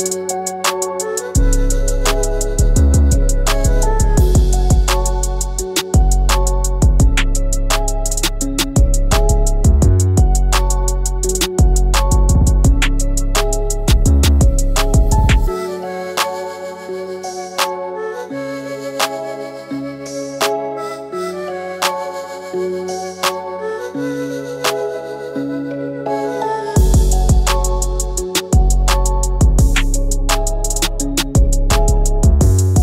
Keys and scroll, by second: 1.2 ctrl+c, 2.0 ctrl+alt+c, 3.4 ctrl+alt+c, 5.2 ctrl+v, 7.0 Return, 11.3 |, 28.2 ctrl+alt+shift+d, 28.8 d.